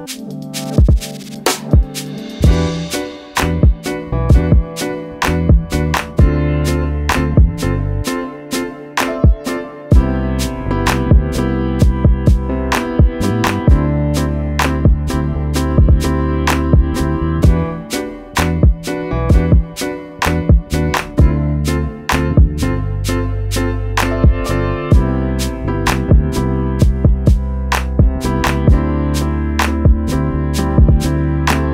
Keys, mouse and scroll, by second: 1.3 click, 2.9 click, 5.4 click, 6.4 BackSpace, 6.7 click, 6.8 BackSpace, 6.9 click, 12.7-13.0 scroll down 2, 14.1 scroll up 1, 14.9 right click, 15.3 click, 18.0 click, 18.5 click, 19.8 click, 23.6 alt+click, 25.2 click, 26.3 alt+click, 27.3 click, 31.6 click.